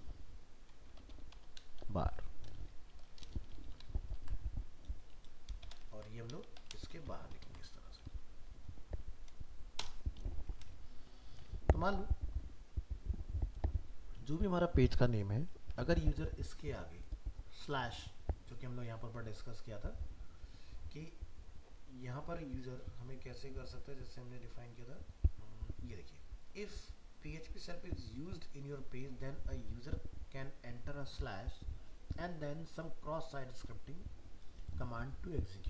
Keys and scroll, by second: 4.2 ctrl+s, 5.9 ctrl+x, 6.9 ctrl+v, 7.5 ctrl+s, 15.7 alt+Tab.